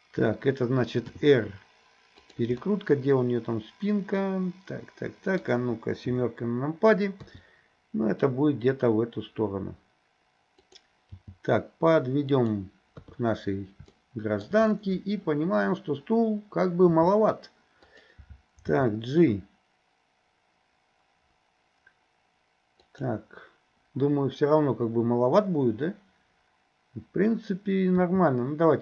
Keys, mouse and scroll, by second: 1.1 r, 2.6-5.4 middle drag, 6.1 KP_7, 7.2 r, 11.2 g, 13.0 KP_3, 14.0 shift+middle click, 16.9 s, 18.7 g, 28.0 s.